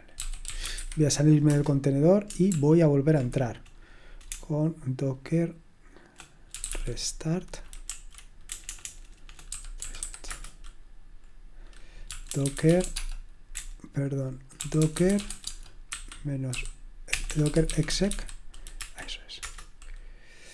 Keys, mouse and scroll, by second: 0.0-1.2 typing, 1.4 Return, 2.5 ctrl+p, 2.7 typing, 4.3-7.2 typing, 7.8 Right, 8.5-19.2 typing, 19.4 Return.